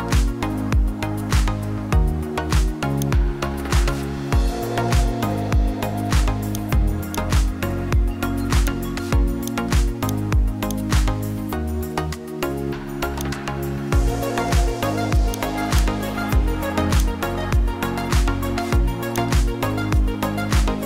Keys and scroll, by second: 1.2 ctrl+i, 6.0 [, 6.2 [, 6.3 [, 18.4 [, 18.9 [.